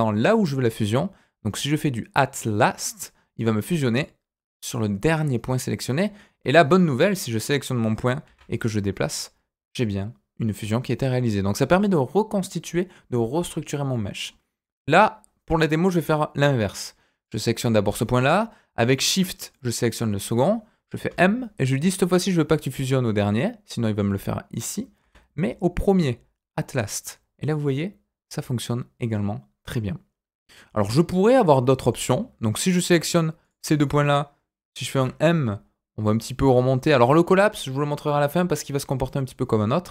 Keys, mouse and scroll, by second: 5.9 click, 6.4 click, 7.0 click, 7.4-8.2 scroll up 2, 8.2 g, 13.5-13.9 scroll down 2, 13.9 middle click, 16.0 middle click, 17.2 click, 18.9 shift+click, 19.5 middle click, 21.0 m, 25.0 m, 30.7-31.9 middle drag, 32.5 click, 33.4 shift+click, 34.9 m.